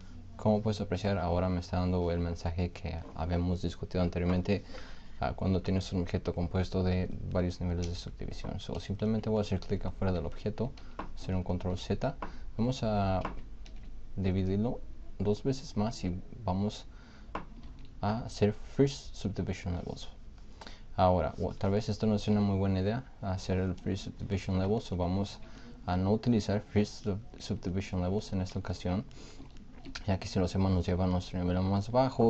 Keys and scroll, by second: 10.8 ctrl+z, 13.7 ctrl+z, 18.9 ctrl+z, 22.3 ctrl+z.